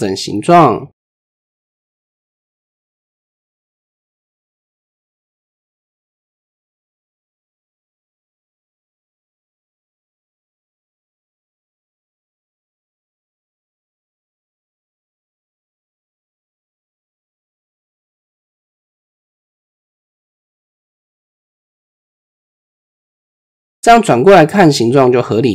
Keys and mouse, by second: 1.6 click, 2.9 click, 3.8-4.8 drag, 6.2 click, 6.8 click, 7.6-8.0 drag, 8.3 click, 9.5 drag, 10.2 click, 12.2 click, 12.7 click, 13.0 click, 15.5 click, 16.7 click, 17.3 click, 19.0 shift+middle click, 20.9 middle click, 23.0 ctrl+KP_3, 24.5 ctrl+KP_3.